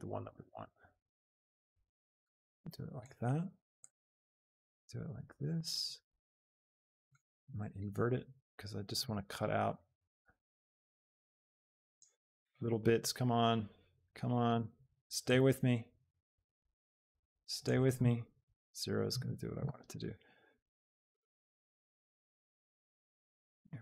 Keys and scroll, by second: 18.5 shift+Return.